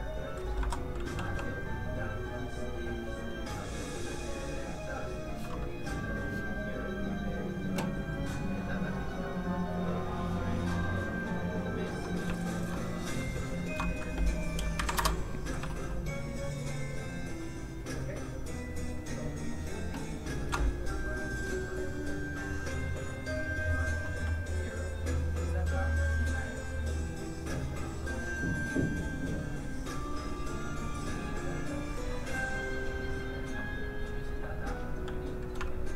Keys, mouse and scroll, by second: 0.6 Escape, 0.8 click, 1.2 g, 1.6 click, 13.2 shift+click, 14.0 click, 14.9 Return, 14.9 KP_5, 15.7 shift+click, 20.6 click, 24.3 click.